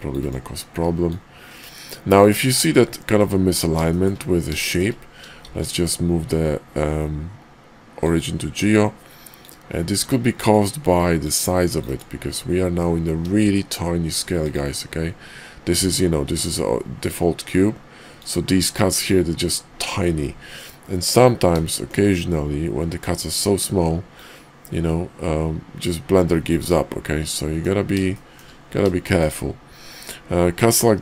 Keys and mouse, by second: 1.1-2.6 drag, 3.2-3.6 middle drag, 3.8 shift+middle drag, 4.5 shift+middle click, 5.4 shift+s, 9.4-10.5 drag, 11.2-12.0 drag, 13.4 shift+a, 16.2 g, 18.5 x, 21.7 shift+drag, 22.9-26.5 drag, 26.6 click, 27.2-27.6 middle drag, 28.1 shift+click, 29.0 shift+click.